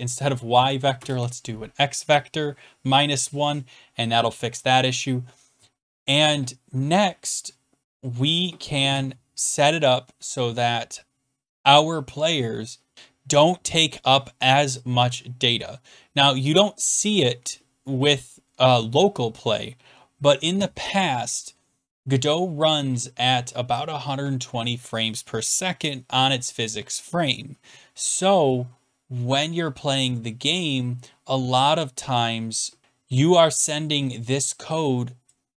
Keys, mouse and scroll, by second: 0.9 BackSpace, 1.1 BackSpace, 29.4-30.7 scroll down 3, 30.7 click, 30.9 scroll down 5, 35.2 click.